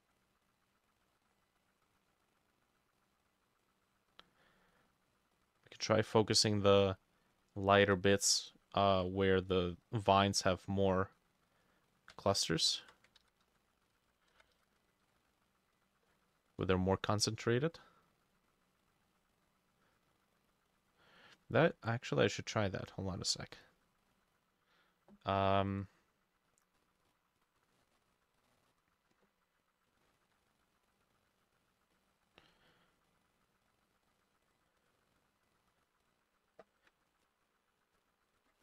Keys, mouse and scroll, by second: 8.5-10.5 drag, 12.2-13.2 ctrl+drag, 12.2-13.7 ctrl+middle drag, 13.2 ctrl+z, 13.5 ctrl+z, 14.0 ctrl+z, 14.0-15.4 middle drag, 14.6 ctrl+shift+z, 15.0 ctrl+click, 15.8 double click, 16.3 double click, 16.7 double click, 17.2 double click, 18.3 double click, 18.5 double click, 19.5 double click, 20.8 double click, 23.2 double click, 23.7 double click, 26.8-27.1 scroll down 3, 27.5 scroll up 3, 27.8 middle click, 28.5 middle click, 30.2 ctrl+click, 31.0 double click, 31.4 double click, 32.0-34.0 drag, 34.2-38.6 drag, 38.3 ctrl+middle click, 38.4 ctrl+c.